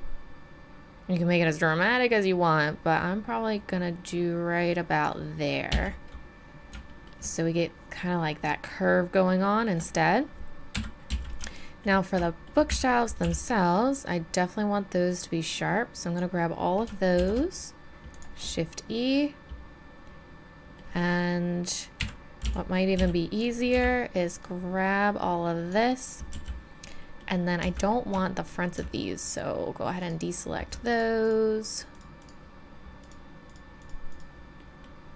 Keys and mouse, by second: 5.7 z, 10.7 KP_3, 11.1 z, 12.7 a, 13.2 b, 17.1 shift+e, 18.7-20.6 middle drag, 22.0 KP_1, 22.4 z, 22.9 z, 23.7 b, 26.3 z, 27.0 middle click, 27.9 middle click, 30.9-34.6 right drag, 34.6 middle click.